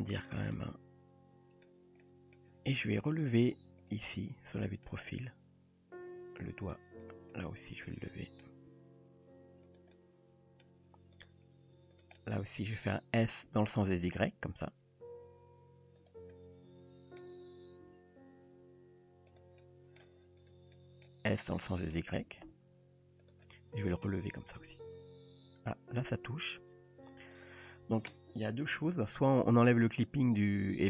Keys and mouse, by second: 0.5-1.7 middle drag, 2.0-2.4 middle drag, 3.1 click, 4.2-4.9 middle drag, 5.1 g, 7.0 click, 7.4-8.4 middle drag, 8.7 g, 9.9-10.7 middle drag, 11.2 drag, 12.2 middle click, 13.5 s, 16.3-17.2 middle drag, 17.9 g, 19.7-20.0 middle drag, 20.8 middle drag, 21.7 middle click, 22.2 s, 23.5 middle click, 24.7 g.